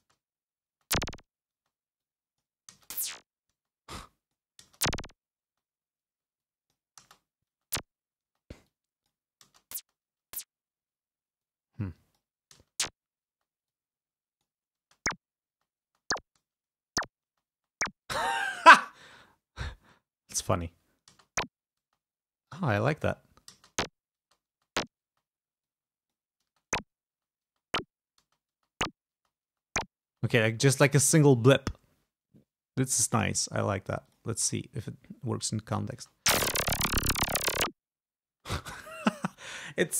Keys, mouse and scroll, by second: 0.0-1.7 typing, 2.1 click, 2.8 space, 3.7 space, 4.1 click, 4.8 space, 5.7 space, 6.5 click, 7.1 space, 8.4 space, 8.8 click, 9.6 space, 10.9 space, 11.6-12.6 drag, 12.7 space, 13.8-14.8 drag, 14.9 space, 15.7 space, 20.0 click, 21.3 space, 22.0 space, 22.6 click, 23.6 space, 24.3 space, 25.8 click, 26.6 space, 27.2 space, 28.3 space, 29.9 space, 30.2 space, 33.3 click, 34.2 click, 35.5 click, 36.1 space, 38.4 space.